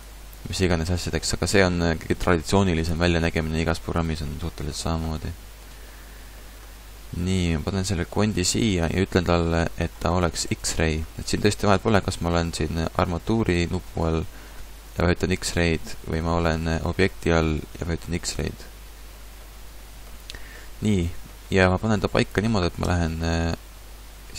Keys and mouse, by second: 2.9-7.2 middle drag, 7.2-14.8 drag, 15.0-18.3 drag, 19.4 middle click, 21.0-22.8 middle drag, 22.8 KP_3, 24.1 KP_1.